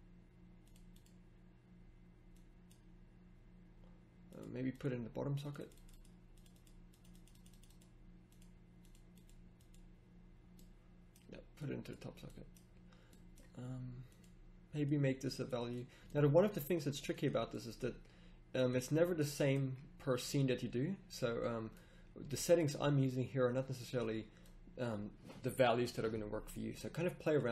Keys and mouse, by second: 17.6-22.5 drag.